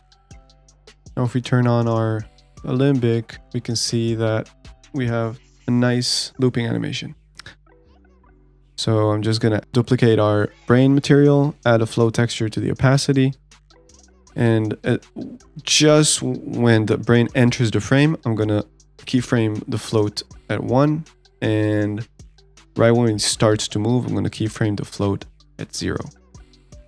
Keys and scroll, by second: 0.6 ctrl+s.